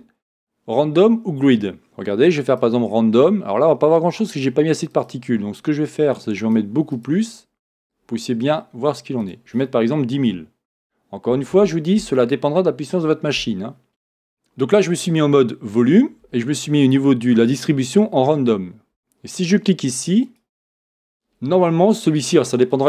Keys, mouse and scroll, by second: 4.3 click, 5.2-6.4 drag, 6.7 click, 9.2-13.9 drag, 12.8 KP_0, 13.5 Return, 13.9-20.3 middle drag, 13.9-17.0 scroll up 2, 20.3-22.8 drag.